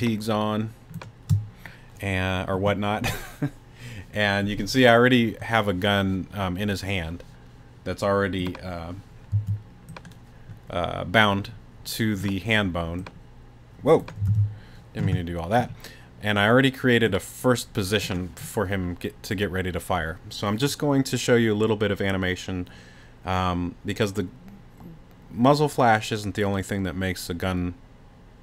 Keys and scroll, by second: 9.3 z, 14.3 super+z.